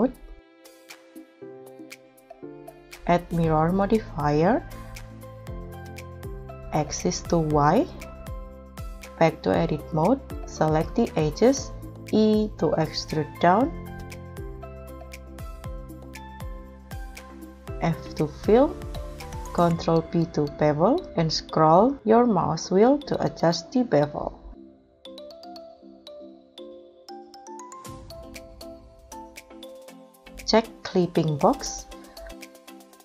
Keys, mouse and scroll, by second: 12.3 e, 14.5 z, 16.1-17.8 scroll up 11, 16.7 middle click, 17.8 f, 20.4 ctrl+b, 21.3-23.8 scroll up 2, 25.6 3, 27.7-28.5 scroll down 8, 29.1-29.8 scroll down 1, 29.8-32.1 scroll up 1.